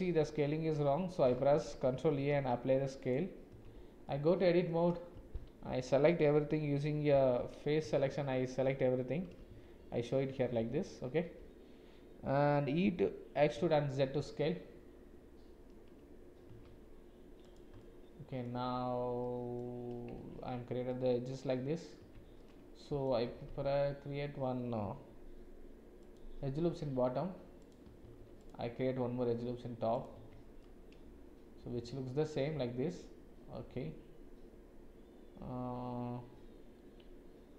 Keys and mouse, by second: 0.5 shift+a, 2.1 ctrl+a, 3.5 Tab, 4.1 click, 5.1 a, 7.1 3, 7.8 a, 9.5 shift+z, 13.4 e, 17.8 click, 19.2 click, 20.2 Tab, 20.9 click, 22.0 Tab, 22.4 click, 23.4 ctrl+r, 28.0 ctrl+r, 30.1 Tab, 30.6-37.5 middle drag.